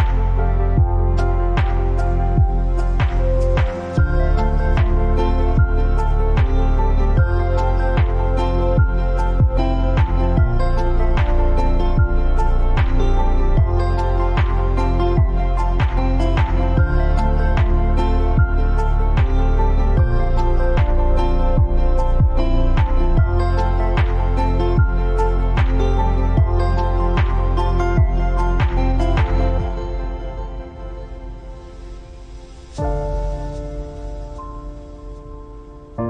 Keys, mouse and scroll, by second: 4.3-14.6 drag, 15.0-21.3 drag, 25.3-26.4 scroll down 1, 26.4-29.7 drag, 33.0-36.0 drag.